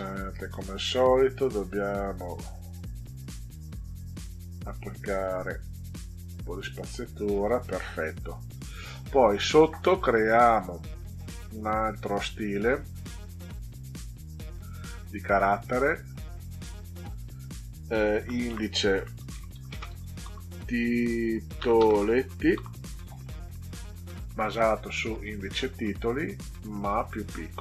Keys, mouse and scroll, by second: 2.9 click, 3.3 click, 4.2 click, 5.5 click, 10.5 click, 13.3 click, 15.2 click, 17.9-22.6 typing, 24.2 click, 25.5 click, 27.1 click, 27.5 click.